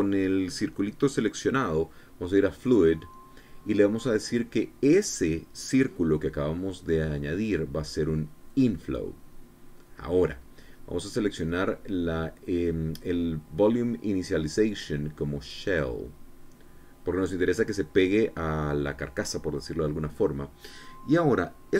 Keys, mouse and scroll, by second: 3.1 click, 4.7 click, 9.0 click, 15.2 click, 16.2 click.